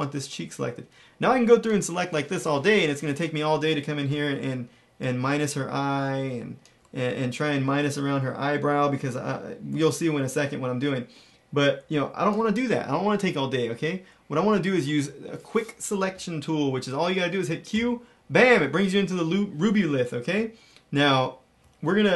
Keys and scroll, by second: 17.6 q.